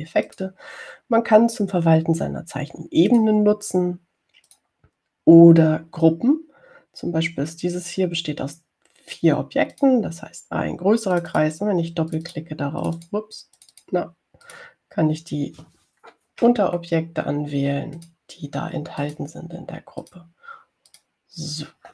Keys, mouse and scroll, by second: 1.6 click, 4.4 click, 5.8 click, 11.0 click, 12.4 click, 13.4 click, 14.1 click, 14.8 click, 15.7 click, 17.7-18.2 ctrl+scroll up 2, 18.2 ctrl+scroll up 1, 19.3 click, 20.3 click, 21.3 click.